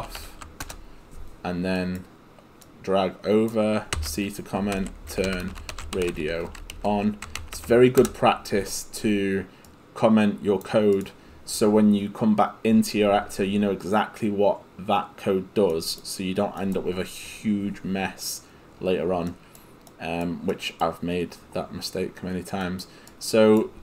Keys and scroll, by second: 0.0-0.2 typing, 0.7 Return, 4.5-7.6 typing, 8.0 Return.